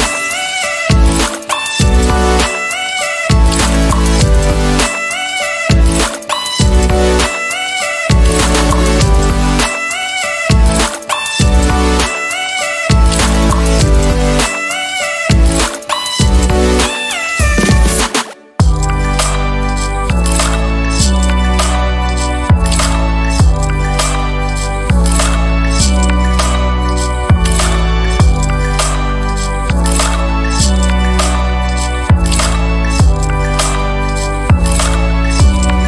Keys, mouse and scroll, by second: 0.8 ctrl+g, 2.7-4.7 ctrl+drag, 5.4 click, 6.0 click, 6.8 click, 7.6-8.1 ctrl+scroll up 2, 9.0-11.0 ctrl+drag, 12.2 click, 13.2 click, 14.4 Right, 15.1 KP_1, 15.7 KP_3, 16.0 KP_Enter, 18.6 ctrl+d, 20.3-22.0 ctrl+drag, 22.2 ctrl+click, 23.4 ctrl+d, 24.0-25.0 ctrl+drag, 25.0 ctrl+y, 26.9 ctrl+shift+KP_Add, 32.4 click, 33.0 click, 34.5 ctrl+y, 35.3-35.8 ctrl+drag.